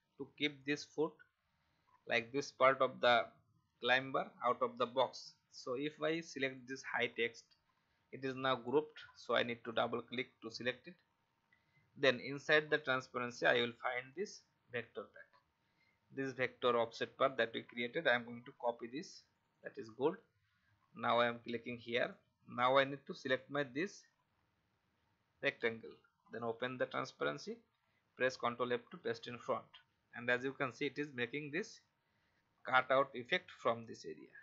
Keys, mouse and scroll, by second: 2.1 alt+scroll up 1, 6.4 click, 18.6 ctrl+c, 19.3-24.2 drag, 28.9 ctrl+f, 30.1 click, 32.5 alt+scroll up 1.